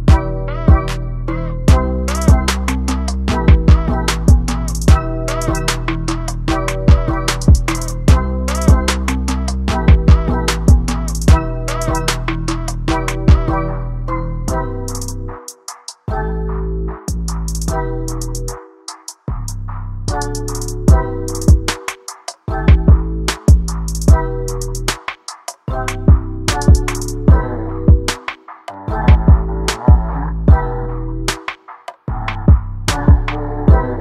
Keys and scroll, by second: 2.5 ctrl+t, 20.3 ctrl+t, 28.4 ctrl+t.